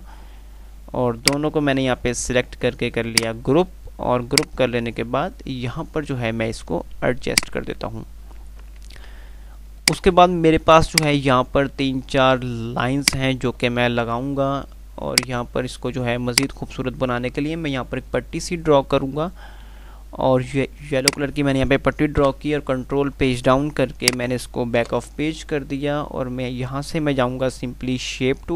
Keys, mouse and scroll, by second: 1.5-2.2 drag, 8.5 F3, 10.1 click, 10.3 F2, 12.3 F2, 13.0 click, 13.2-13.8 F2, 15.3-19.6 drag, 22.5 Page_Down, 24.3 click, 25.2 shift+Page_Down.